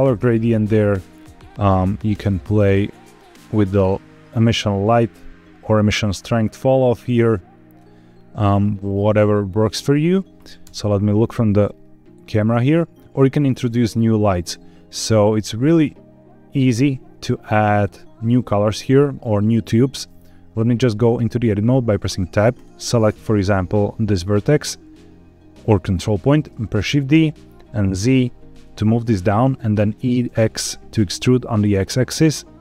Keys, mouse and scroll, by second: 0.6-7.7 drag, 8.9 scroll down 2, 10.6 KP_0, 11.4-12.0 scroll up 4, 12.4 scroll down 1, 16.8 shift+middle click, 17.8 scroll up 1, 21.1 Tab, 22.5-24.3 drag, 27.1 shift+d, 28.0 z, 29.0 click, 29.9 e, 30.2 x.